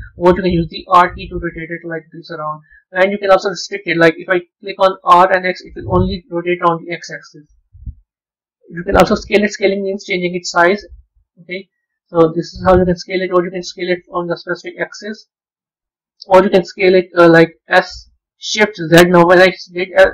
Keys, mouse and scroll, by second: 0.7 r, 4.9 r, 10.5 s, 13.8-15.1 drag, 15.1 ctrl+z, 17.6 r.